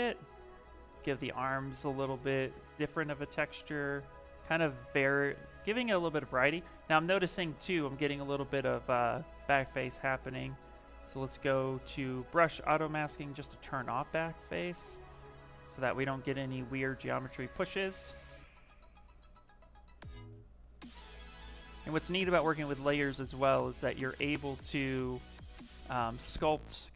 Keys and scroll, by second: 5.5 ctrl+z, 5.9 ctrl+z, 6.2 ctrl+z, 6.8 ctrl+z.